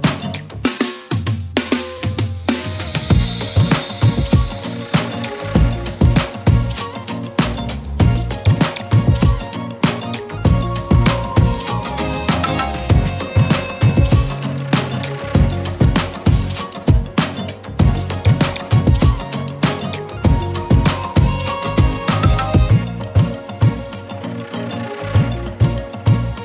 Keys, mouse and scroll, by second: 0.0 scroll down 2, 0.2 middle click, 0.5 KP_1, 0.7-1.5 scroll down 8, 1.5 a, 1.9 KP_1, 2.2 scroll down 3, 2.4 shift+middle click, 2.6-3.3 scroll up 12, 2.7 shift+middle click, 3.3 ctrl+click, 5.1 shift+middle click, 5.3 scroll down 4, 5.5 shift+middle click, 5.8 ctrl+click, 6.3 shift+middle click, 6.6 ctrl+click, 7.4 shift+middle click, 7.6-8.0 scroll up 2, 8.0 shift+middle click, 8.5 ctrl+click, 9.1 shift+middle click, 9.5 scroll down 3, 9.7 shift+middle click, 10.4 ctrl+click, 11.9 shift+middle click, 12.3 scroll down 5, 12.5 ctrl+click, 13.1-13.8 scroll up 11, 13.8 shift+middle click, 14.3 ctrl+KP_Subtract, 14.9-15.7 scroll up 8, 17.3 alt+z, 17.4 middle click, 18.0-18.6 scroll down 1, 18.6 s, 20.6 scroll down 6, 20.8 middle click, 21.3 ctrl+z, 21.6 middle click, 22.2 x, 23.1 m, 23.9-25.1 middle drag, 25.1-25.8 ctrl+KP_Add, 26.0 ctrl+KP_Add, 26.2 ctrl+KP_Add.